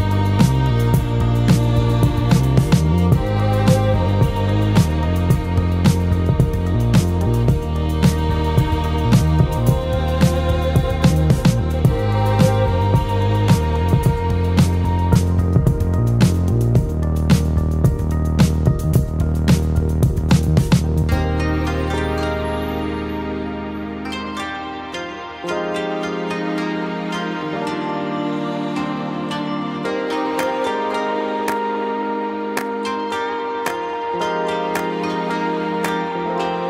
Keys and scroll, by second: 14.8-15.6 typing, 18.8-19.5 typing, 20.4 ctrl+space, 21.0-26.2 ctrl+space, 29.9 [, 30.3 [, 30.4 [.